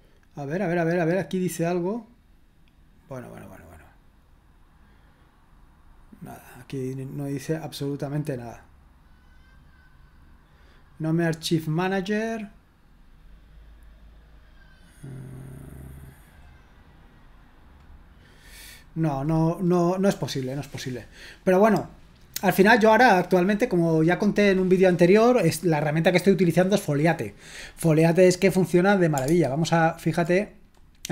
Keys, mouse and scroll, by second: 7.0 click, 12.4-13.4 scroll down 1, 13.4-13.7 scroll down 1, 21.8 click, 29.3 alt+Tab.